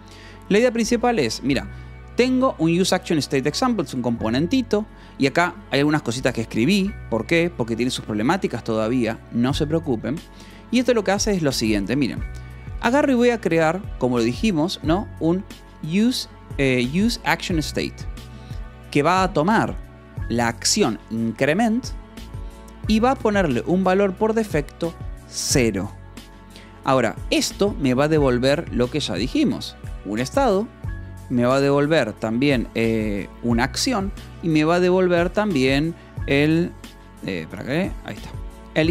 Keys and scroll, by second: 0.2 j, 1.4 shift+v, 3.7 Escape, 4.8 j, 5.6 shift+v, 6.1 h, 6.6 j, 9.3 Escape, 10.1 j, 10.8 shift+v, 11.9 Escape, 12.2 l, 12.6 v, 13.2 e, 14.5-17.1 typing, 18.2 Escape, 18.4 l, 18.7 v, 19.2 e, 22.5 Escape, 22.9 l, 23.4 v, 24.0 e, 26.2 Escape, 27.9-35.0 typing, 31.9 Escape, 35.7 Escape, 36.2-38.9 typing, 37.2 Escape.